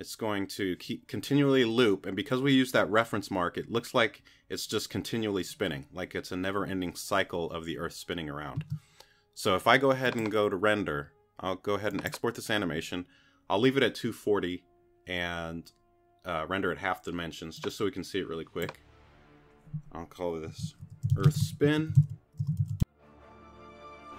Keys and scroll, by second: 20.2-23.3 typing.